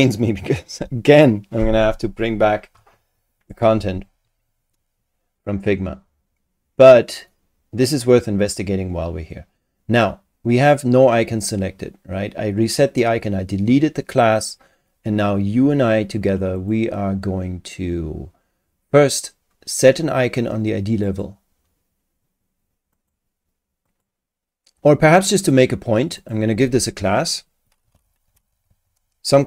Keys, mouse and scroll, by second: 16.6 click, 21.0 click, 22.9 click, 23.9 click, 25.4 click, 26.2 click, 27.6-29.4 typing.